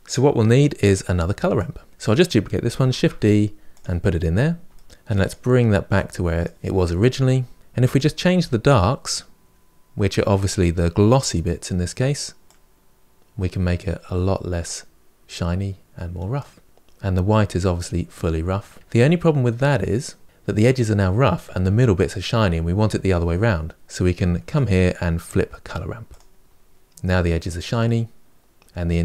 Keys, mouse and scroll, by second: 2.8 shift+d, 4.6 shift+middle click, 4.9-7.6 drag, 7.7 click, 11.1 click, 18.9 middle click, 19.8-20.3 scroll up 3, 26.0 click, 26.9-27.4 scroll down 5, 27.4-29.0 middle drag.